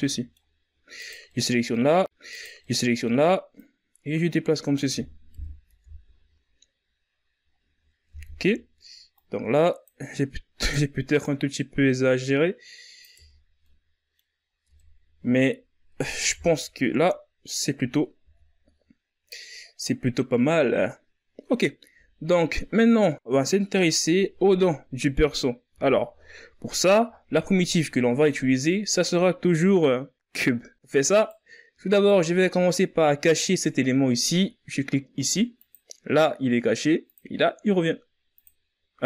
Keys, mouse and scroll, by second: 0.7-1.7 middle drag, 1.7 right click, 2.0 middle click, 2.9-4.7 drag, 4.7 KP_1, 5.0 Tab, 5.7-6.9 scroll down 7, 6.9-7.4 scroll up 6, 7.4 Tab, 8.0-8.5 scroll up 2, 8.5-9.9 drag, 9.9 right click, 10.6-12.5 drag, 12.5 Tab, 12.8 scroll down 1, 13.0 middle click, 13.7-14.0 scroll up 2, 14.0 Tab, 14.2-15.3 middle drag, 15.3 KP_1, 15.6 Tab, 16.2-17.2 scroll down 1, 17.2-17.6 scroll up 3, 17.6 z, 18.9-21.9 scroll down 1, 25.1 z, 25.4-26.0 scroll down 4, 30.5 right click, 31.2 right click, 34.9 click, 36.4 click, 37.7 click.